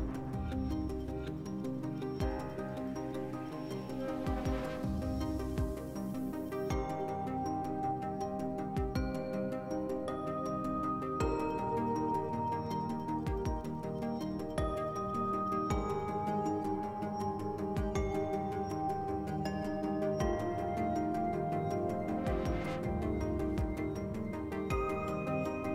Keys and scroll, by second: 0.2 s, 2.8 s, 5.3 s, 6.4 s, 8.2 s, 9.4 2, 22.6 s, 23.8 4, 24.2 2.